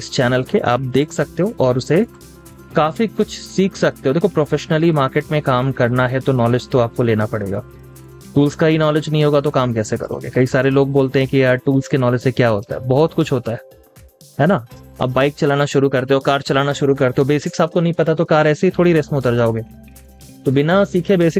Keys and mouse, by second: 1.8 typing, 4.1 double click, 13.9 z, 20.2 double click.